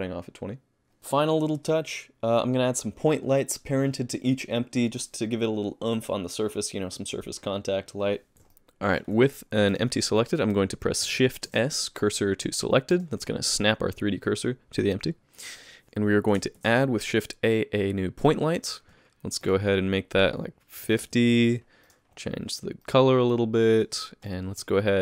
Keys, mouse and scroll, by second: 1.0 space, 8.3 middle click, 8.3 shift+right click.